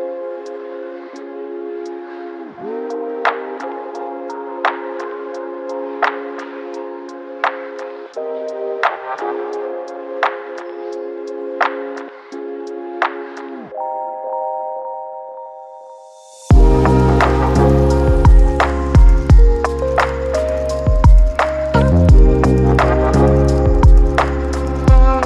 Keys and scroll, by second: 0.0 ctrl+1, 1.5 v, 1.7 v, 13.3-13.8 typing, 15.8-16.3 typing, 17.4 v, 18.0 ctrl+d, 18.3-18.9 v.